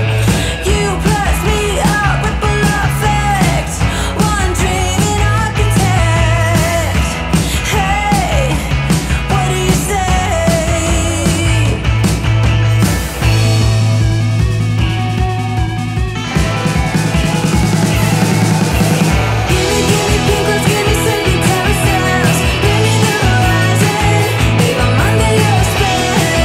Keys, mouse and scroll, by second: 1.6 ctrl+v, 2.3 click, 5.4-6.8 typing, 8.5-11.7 typing, 12.8 click, 13.8-14.5 middle click, 14.8 v, 15.7-19.1 drag, 19.1-21.6 drag, 23.1-24.0 scroll down 1, 24.0-24.7 middle click, 24.9-26.3 scroll down 1, 26.3-26.4 drag.